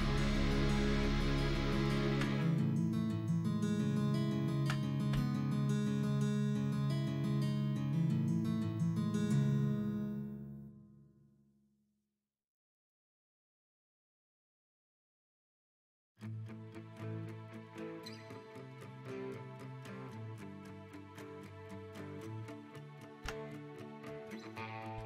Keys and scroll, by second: 1.1 s, 3.7 x, 5.7 s, 9.5 ctrl+z.